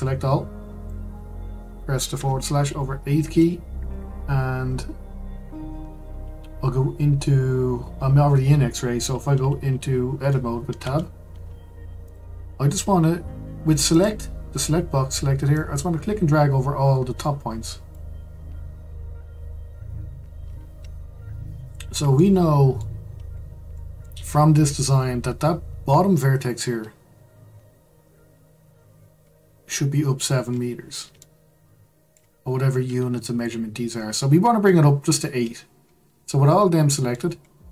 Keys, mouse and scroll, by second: 2.1 KP_Divide, 3.1-3.8 scroll up 2, 3.8-6.9 scroll up 3, 10.8 Tab, 12.0 click, 13.9-15.6 drag, 22.1-23.0 shift+middle drag, 23.0-23.7 scroll up 3, 23.7-24.5 shift+middle drag, 24.5-25.2 scroll up 2, 25.2-27.7 scroll up 1, 28.0-29.2 scroll down 3, 29.2-30.1 scroll down 1, 30.1-31.2 scroll up 5, 31.2-33.7 shift+middle drag, 33.7-35.8 scroll up 1, 35.9-36.3 scroll down 4, 36.3-37.3 shift+middle drag, 37.3-37.7 scroll up 7.